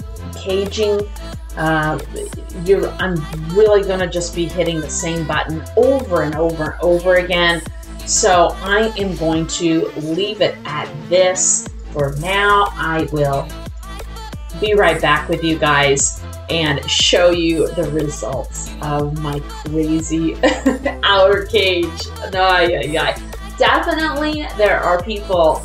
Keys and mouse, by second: 9.5 middle click, 10.1 click, 11.1 shift+middle click, 12.9-25.6 drag.